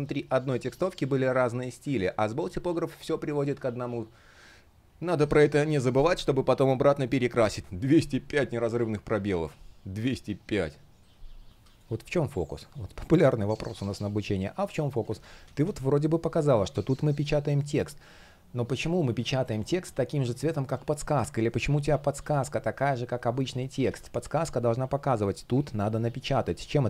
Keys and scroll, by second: 2.1 shift+super+я, 2.8 shift+super+я, 11.5 space, 14.9 super+z, 21.0 super+z, 23.1 super+z.